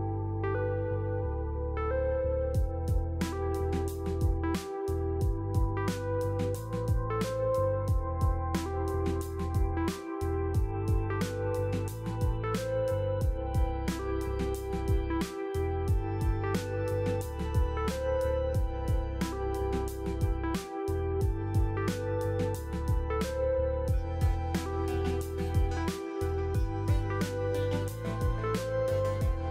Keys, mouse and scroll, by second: 0.5-2.3 typing, 0.6 click, 7.1 click, 8.5 click, 11.2-17.0 typing, 13.3 click, 13.5 click, 17.6-18.2 scroll, 18.7 Return, 19.8 click, 20.9 click, 20.9 click, 22.5 click, 28.3 click, 29.3 click.